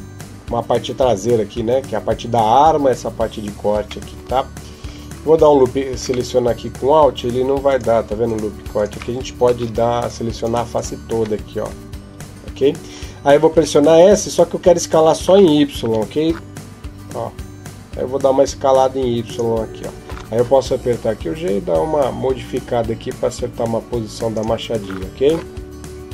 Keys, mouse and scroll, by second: 3.9 middle click, 5.1 alt+right click, 6.1 middle click, 7.5 alt+right click, 8.1 alt+right click, 8.6 alt+right click, 9.3 ctrl+Tab, 10.2 right click, 10.6 right click, 11.5 KP_7, 13.3 s, 20.5 g.